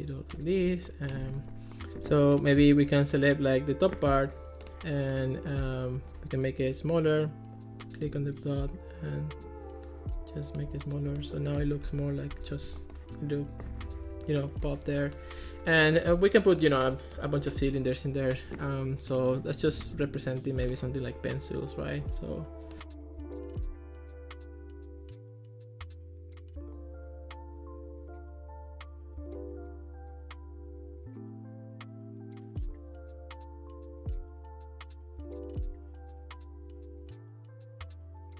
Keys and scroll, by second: 11.9 Escape, 23.4 2, 23.5 Return, 23.7 Return, 23.9 super+d, 24.9 2, 25.1 Return, 25.4 super+d, 26.1 super+z, 27.0 super+z, 28.1 3, 28.2 Return, 31.7 Escape, 32.3 Escape, 34.3 Escape, 36.7 2, 36.7 Return, 37.6 1, 37.7 Return, 37.9 Return.